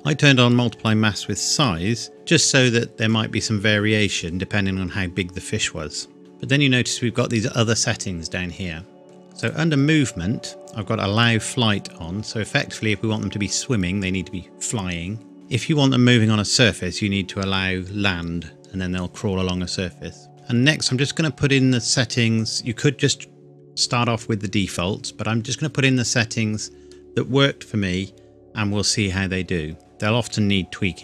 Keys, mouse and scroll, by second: 1.5 click, 8.4-8.9 scroll down 1, 9.4 click, 20.3-21.1 scroll down 1.